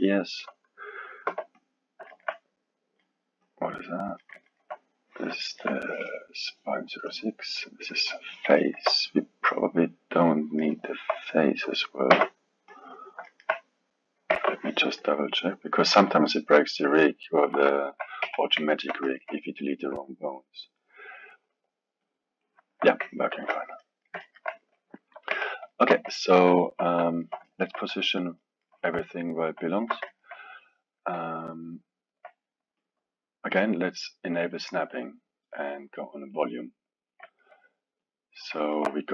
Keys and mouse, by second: 1.3 x, 2.1-3.6 alt+middle drag, 3.6 click, 4.2-7.1 ctrl+middle drag, 7.1 click, 8.6-12.0 ctrl+middle drag, 12.1 x, 13.3-14.3 alt+middle drag, 14.3 Tab, 16.3-17.8 drag, 17.8-18.2 alt+middle drag, 18.2 KP_1, 18.6-20.8 ctrl+middle drag, 20.8-23.4 drag, 23.4 ctrl+z, 23.8-25.3 middle drag, 25.3 KP_1, 25.7-32.8 alt+middle drag, 32.8-33.5 drag, 34.4-36.4 drag, 36.8-37.3 drag, 37.3-38.0 ctrl+middle drag, 38.0 click, 38.6-39.1 alt+middle drag.